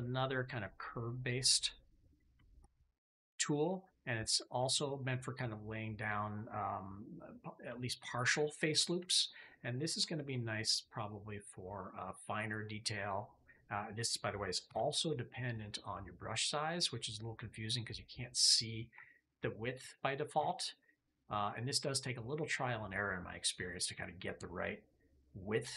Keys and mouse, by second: 1.9 middle click, 2.4 shift+middle click, 3.4 shift+middle click, 4.1 middle click, 4.5 shift+click, 5.3 click, 7.6 shift+click, 8.5 click, 9.0 shift+click, 9.3 click, 10.0 shift+click, 10.8 click, 11.5 click, 14.6 f, 16.3 click, 20.3 f, 23.7 click.